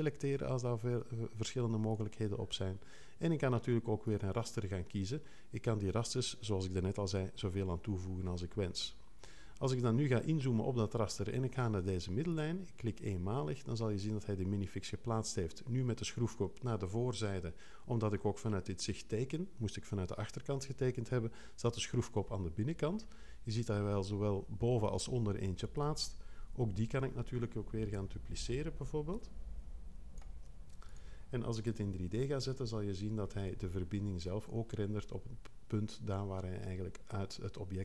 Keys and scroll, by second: 26.5 2, 31.6 l.